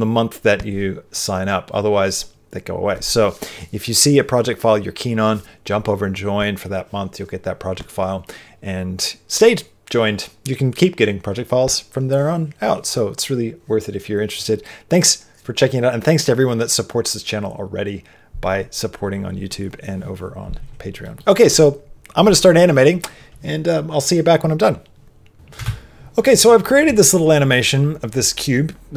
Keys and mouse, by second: 25.5 space.